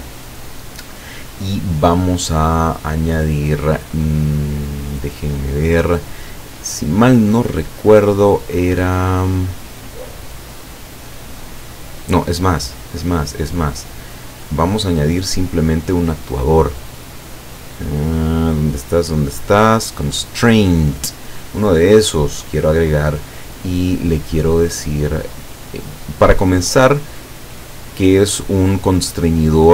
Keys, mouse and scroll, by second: 2.6 click, 13.7-15.9 drag, 16.7 click, 20.8 click, 22.4-24.1 drag, 27.8 click.